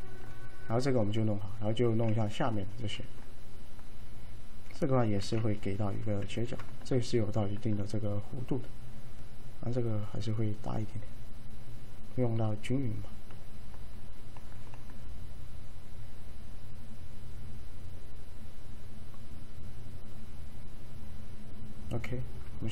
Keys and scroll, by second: 5.3 f, 6.4 alt+f.